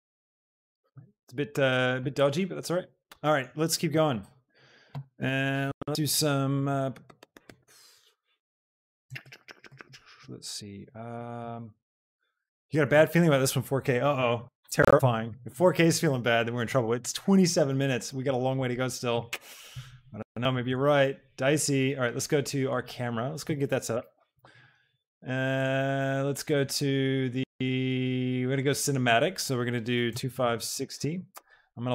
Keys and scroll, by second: 20.8 shift+a, 30.1 KP_5, 30.5 KP_0, 30.9 Return.